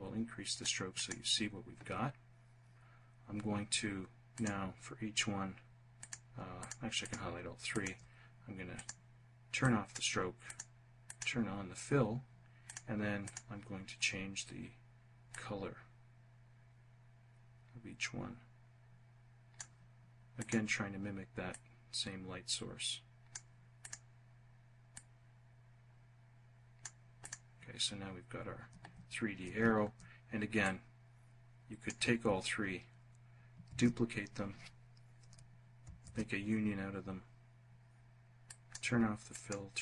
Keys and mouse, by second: 0.0 click, 3.4 click, 5.1 click, 5.7 shift+click, 7.8 click, 8.7 click, 9.5 click, 10.1 click, 11.7 click, 12.3 click, 14.3-18.7 drag, 19.4 click, 20.5-23.0 drag, 24.0-25.9 drag, 26.2 click, 29.6-31.0 drag, 32.7 ctrl+d, 34.8 ctrl+shift+=, 37.5 click, 38.3 click, 39.0 click.